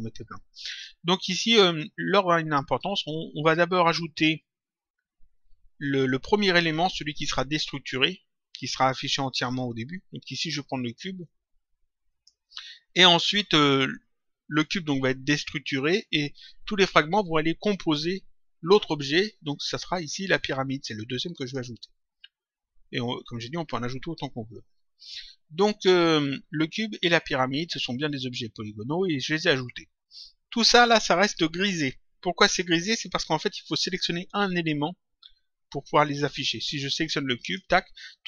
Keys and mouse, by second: 11.1 click, 20.3 click, 37.3 click.